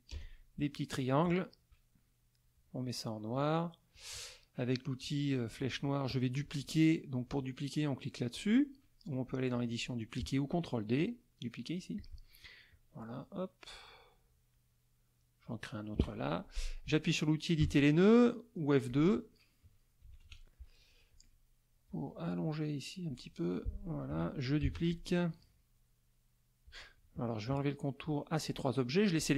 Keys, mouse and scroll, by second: 0.1 KP_Add, 0.8 middle click, 2.3 click, 3.9 click, 8.3 click, 9.5 click, 12.0 click, 12.7-15.6 drag, 17.6 F2, 18.9 click, 20.0 KP_Subtract, 20.3 KP_Add, 21.8-23.3 drag, 24.1 F1, 24.6 ctrl+d, 24.9-26.8 ctrl+drag, 27.4 shift+click, 28.0 shift+click.